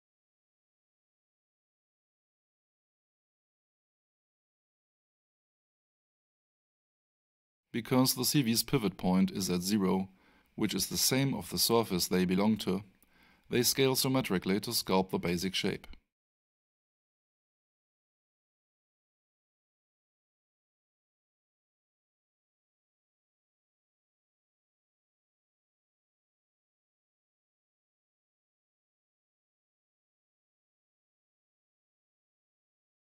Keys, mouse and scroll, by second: 1.3-1.6 alt+shift+scroll up 1, 3.9-4.5 shift+scroll up 2, 4.5 click, 8.5 click.